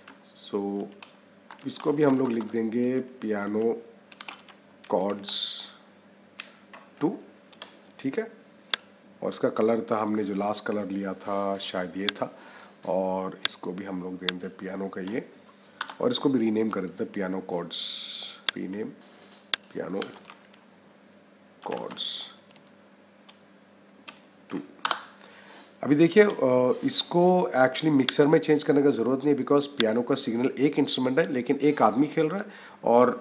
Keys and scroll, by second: 1.4 BackSpace, 1.6 a, 2.0 BackSpace, 2.7 a, 4.0 space, 4.3 c, 15.6 Return, 19.8 space, 20.2 c, 21.5 h, 24.2 -, 24.7 Return.